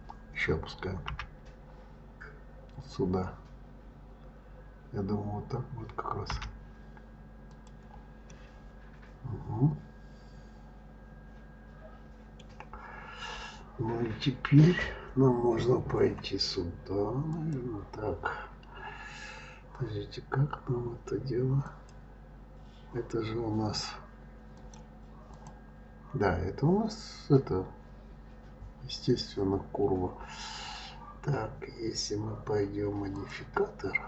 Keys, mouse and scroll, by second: 1.1 g, 8.3-11.3 middle drag, 17.2 click, 21.6 click, 24.5-27.6 drag, 33.0-34.0 drag.